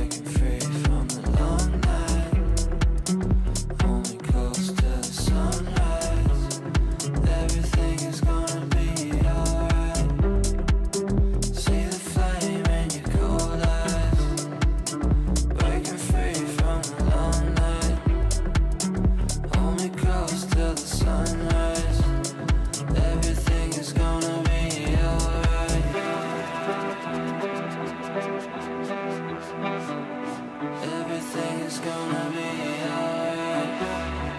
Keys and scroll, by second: 3.1 r, 8.3 shift+Page_Down, 10.5 Delete, 16.7 g.